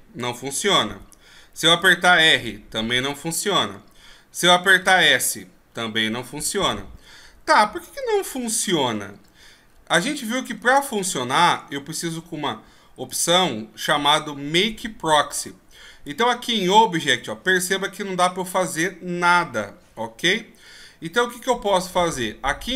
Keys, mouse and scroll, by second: 1.7 r, 4.8 s, 8.1-8.4 shift+scroll up 3, 8.6-9.1 shift+scroll down 1, 9.1-10.0 ctrl+scroll up 5, 10.0 ctrl+scroll down 1, 11.0-11.3 shift+scroll up 1, 13.1 click, 16.0 click.